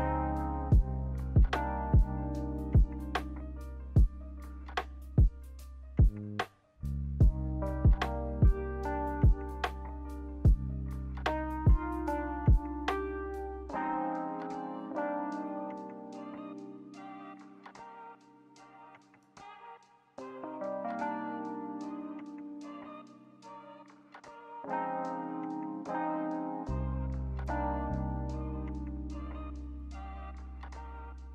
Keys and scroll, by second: 7.1 0, 7.2 Return, 9.0-10.8 typing, 15.1 Delete, 17.3 d, 19.5 a, 25.0 z, 26.0 Delete, 28.5 b, 29.8 ctrl+z, 30.0 ctrl+z, 30.2 ctrl+z.